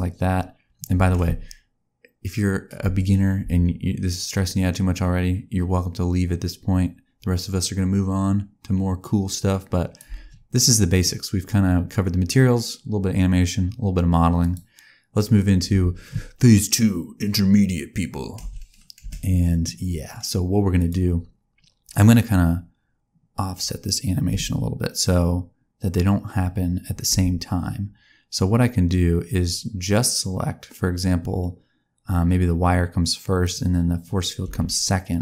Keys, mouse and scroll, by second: 0.9 space, 2.8 space, 3.4 space, 4.0 click, 10.0 space, 10.9 click, 14.3 click, 15.6 space, 18.3 space, 19.0 space, 20.7 click, 22.0 click, 24.2 space, 27.0 space, 33.3 click, 34.4 a.